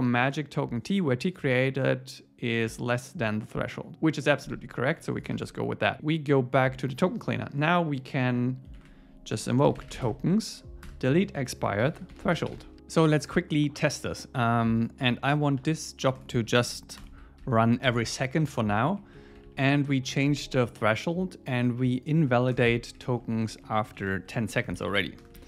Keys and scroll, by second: 8.8 shift+super+Left, 10.9 Return, 15.6 Right, 16.4 Left, 17.8 Escape, 19.0 Down, 19.4 super+Right, 19.9 Left, 23.4 super+Right, 23.7 Left, 25.2 Return.